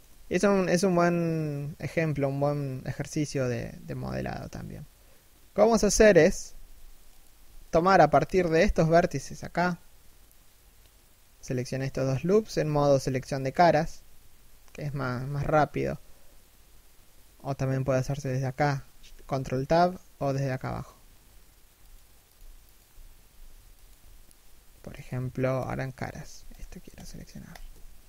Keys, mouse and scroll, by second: 6.8 Tab, 7.2 alt+right click, 14.3 Tab, 20.3 Tab, 26.1 alt+right click.